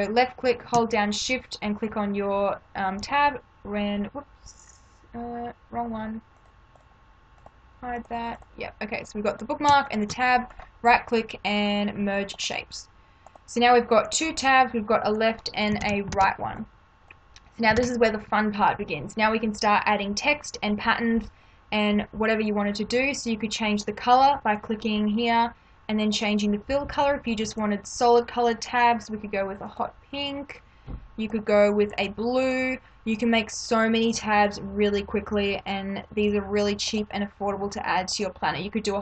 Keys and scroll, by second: 15.8 ctrl+-, 17.8 ctrl+-.